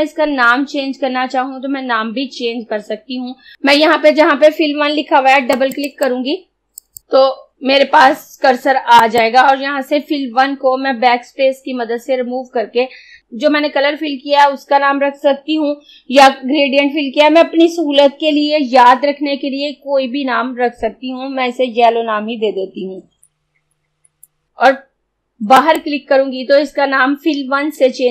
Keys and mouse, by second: 3.5 click, 5.6 click, 9.1 click, 11.3 BackSpace, 23.3 y.